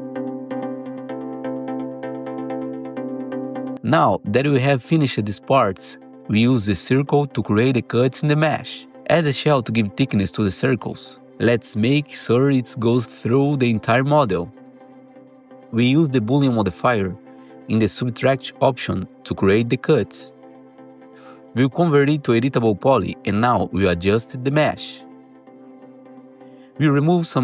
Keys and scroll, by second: 0.4 ctrl+shift+e, 2.1 F3, 2.4 F3, 2.6 1, 4.1 F3, 4.5 2, 5.1 2, 6.0 F3, 16.0 alt+q, 16.6 alt+x, 18.2 F4, 18.5 F4, 24.7-25.9 typing, 27.1 ctrl+BackSpace.